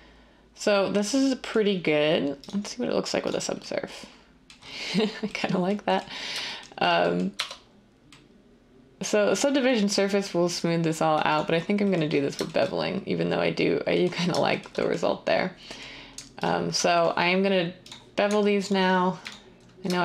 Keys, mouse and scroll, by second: 7.3 Tab.